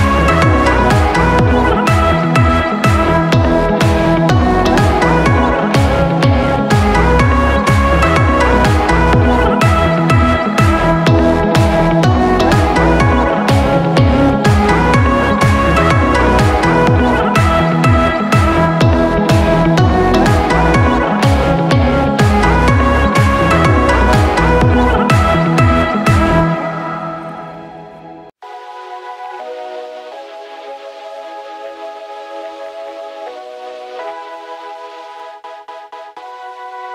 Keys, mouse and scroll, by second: 12.6 ctrl+i.